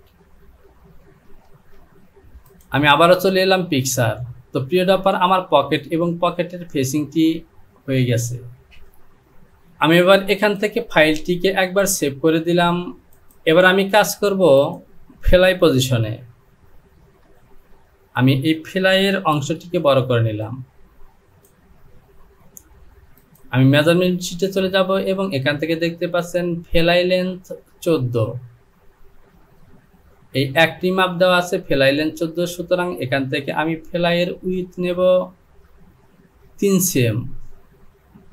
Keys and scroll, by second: 1.8 ctrl+z, 17.2 Home, 19.3 Return.